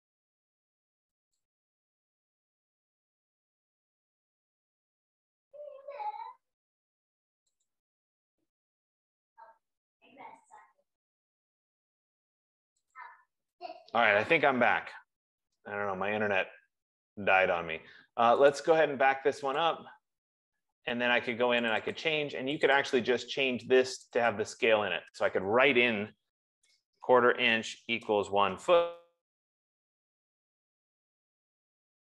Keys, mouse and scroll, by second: 8.6 F15, 13.5 click, 19.1 click, 20.1 click, 22.5 click, 23.8 click, 24.8 click, 25.1 click, 26.5 ctrl+a, 26.9-28.8 typing.